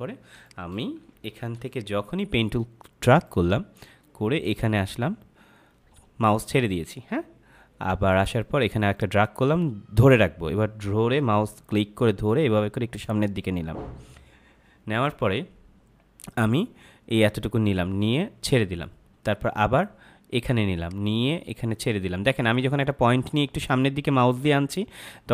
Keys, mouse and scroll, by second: 0.0 =, 0.3 space, 0.4 click, 1.0 ctrl+=, 1.5 space, 1.6 click, 2.0 space, 8.9 click.